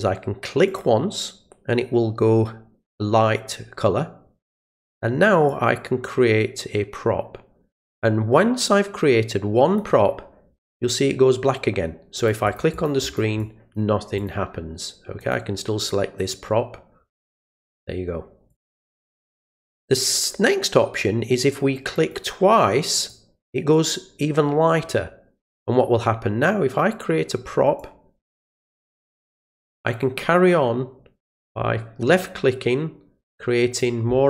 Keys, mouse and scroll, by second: 0.7 click, 5.5-9.8 drag, 12.2 click, 12.4 click, 12.7 click, 13.0 click, 13.4 click, 14.2 click, 15.2 click, 18.5 click, 21.9 click, 23.0 click, 27.8-29.5 drag, 30.0-31.2 drag, 32.1-33.8 drag.